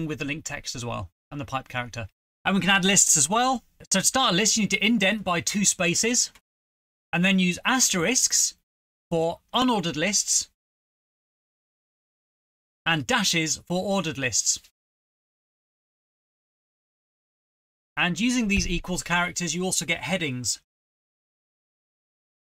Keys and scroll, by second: 2.2 BackSpace, 4.0-8.0 typing, 6.4 Return, 6.5 ctrl+v, 7.7 ctrl+v, 7.8 Return, 8.3 ctrl+v, 9.0 Return, 9.1-11.1 typing, 12.4 Return, 12.4 Return, 12.5-14.8 typing, 14.8 Return, 14.8 ctrl+v, 18.6-19.6 typing, 19.9 shift+Home, 20.1 ctrl+c, 20.2 Right, 20.3 Return, 20.4 ctrl+v, 20.7 =, 20.7 =, 20.9 Home, 21.0 =.